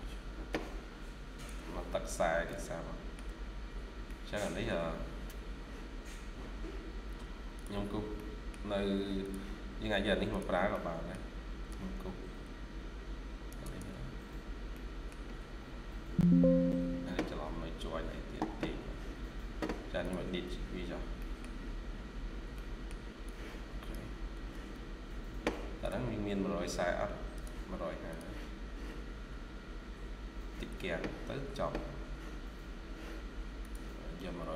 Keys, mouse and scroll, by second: 0.3 scroll down 1, 1.8 scroll down 1, 2.3 middle click, 3.4-3.7 scroll down 1, 3.9 middle click, 7.7-8.0 scroll down 1, 8.0 middle click, 10.6 middle click, 12.2 ctrl+click, 13.5 ctrl+click, 14.2-14.6 scroll down 1, 14.6 middle click, 20.7 scroll down 1, 21.1 middle click, 21.7 scroll down 1, 22.4 middle click, 22.9 scroll up 1, 24.2 typing, 26.7-27.0 scroll up 1, 27.0 typing.